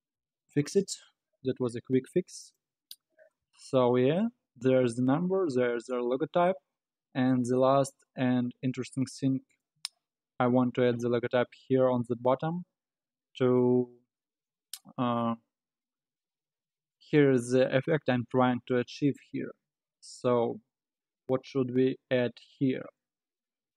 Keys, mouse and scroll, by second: 0.1 KP_Divide, 0.9-1.4 scroll up 6, 1.4 Tab, 2.0-2.5 scroll up 8, 2.5 click, 3.0-3.4 scroll down 4, 3.4-6.4 middle drag, 6.5-7.0 scroll up 7, 7.0-8.1 scroll down 5, 8.1-11.2 middle drag, 13.6-14.2 scroll up 4, 14.2-16.6 scroll down 4, 16.9-19.2 middle drag, 19.2-19.6 scroll up 2, 19.6 scroll down 2.